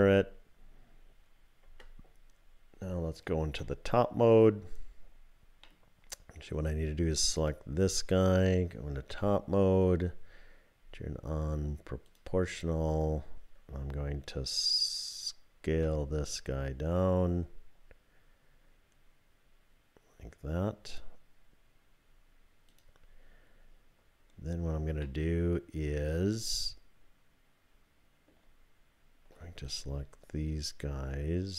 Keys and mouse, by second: 1.6 Tab, 3.5 KP_7, 5.6 click, 7.4 click, 12.1 click, 15.7 s, 25.0-28.3 drag, 29.7-31.5 drag.